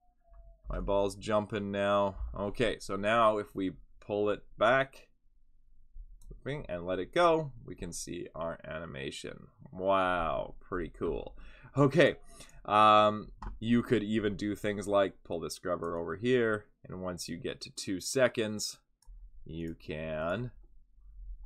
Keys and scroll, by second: 0.6 F6.